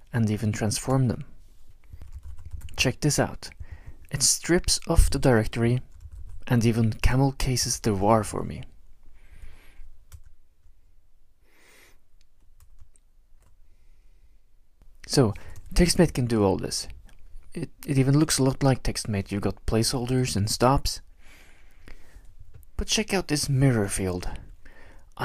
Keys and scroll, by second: 0.0-3.1 typing, 5.4-8.9 typing, 10.1 typing, 12.7 Tab, 15.2-16.1 typing, 18.8-19.2 Right, 19.8 Right, 19.9 Right, 20.0 Right, 20.1 Right, 20.2 Right, 20.4 Right, 20.5 Right, 23.5 ctrl+shift+-.